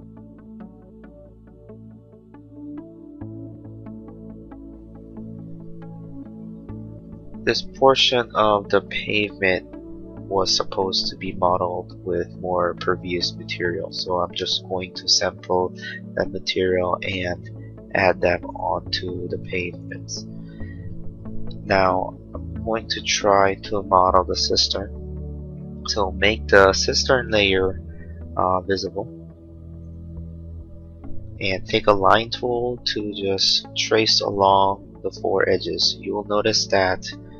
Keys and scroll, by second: 31.9 l.